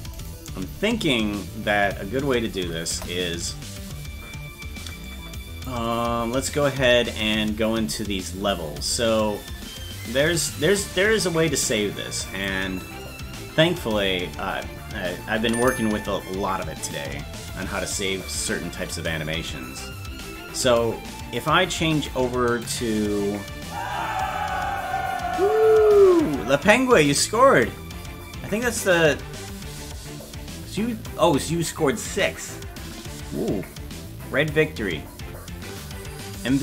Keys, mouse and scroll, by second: 0.2-1.7 right drag, 2.9 KP_0, 5.1 click, 7.6-8.4 scroll down 1, 10.1-36.6 drag, 10.1 scroll down 7.